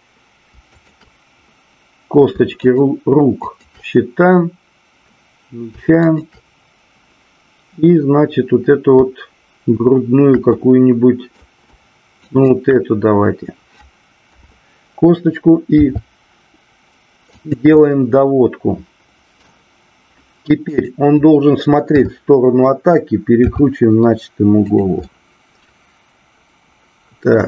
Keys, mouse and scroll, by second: 0.7-1.6 shift+drag, 2.6 shift+click, 3.5 shift+click, 10.5 middle click, 12.2 shift+click, 14.2 KP_7, 15.7 r, 17.3 click, 17.7-19.4 middle drag, 20.7 click, 21.8 KP_7, 23.5 r, 25.1-27.4 middle drag.